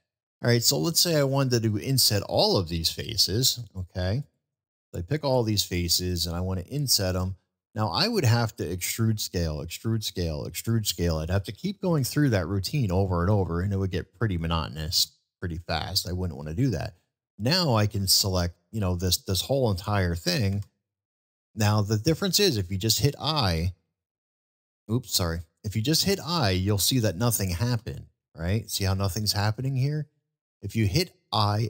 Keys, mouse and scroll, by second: 0.8-1.2 middle drag, 3.7 shift+click, 4.9 shift+click, 5.4-6.0 shift+middle drag, 6.7-7.2 shift+middle drag, 7.4-8.1 shift+middle drag, 11.7-12.1 shift+middle drag, 12.4-12.7 shift+middle drag, 13.2-14.9 shift+middle drag, 15.5 shift+click, 15.9-16.3 middle drag, 16.7 shift+click, 17.2-17.5 shift+middle drag, 17.7-18.2 middle drag, 18.9-19.2 shift+middle drag.